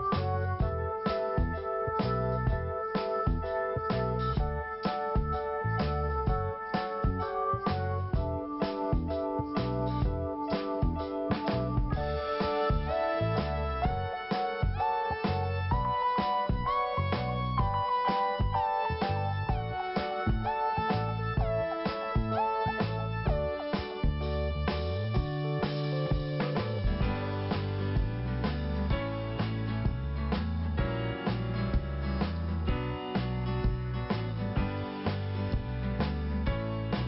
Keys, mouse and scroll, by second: 0.3 click, 2.1 click, 2.2 click, 3.5 click, 5.8 scroll up 1, 6.9 click, 7.0 click, 8.1 click, 9.9 click, 10.0 click, 11.1 click, 12.4 click, 14.3 click, 14.4 click, 14.7 click, 14.8 double click, 15.4 double click, 16.6 click, 16.7 click, 17.4 scroll down 1, 19.0 click, 21.9 click, 26.8-27.1 scroll down 1, 30.0 click, 33.5 click, 33.5 click, 36.2 click.